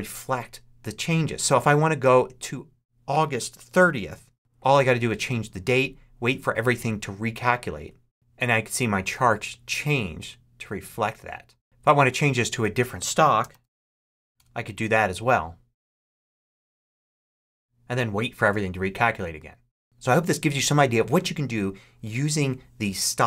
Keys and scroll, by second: 3.6 8, 4.4 Return, 13.0-14.3 typing, 15.1 Return.